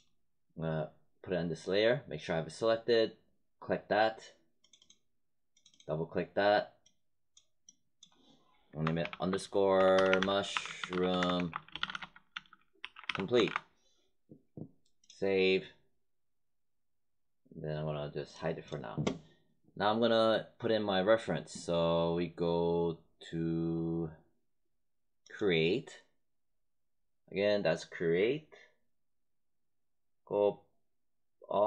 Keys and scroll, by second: 8.9-13.9 typing.